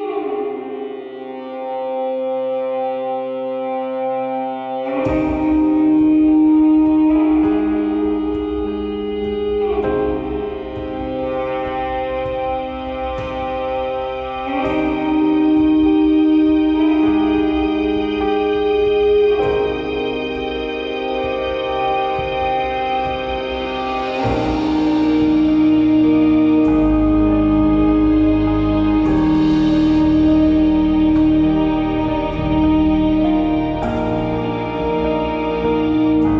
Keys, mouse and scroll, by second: 2.7 click, 7.7 shift+z, 9.3 click, 9.4-12.6 drag, 36.1 click.